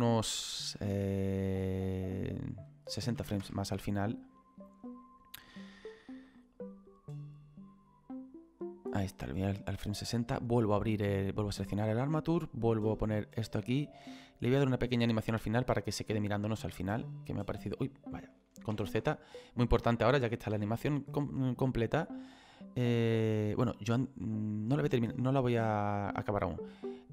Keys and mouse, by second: 0.7 click, 3.1 KP_6, 3.5 Return, 3.5 KP_Enter, 6.6 click, 11.6 click, 13.2 click, 15.7 click, 25.6 click, 26.7 click.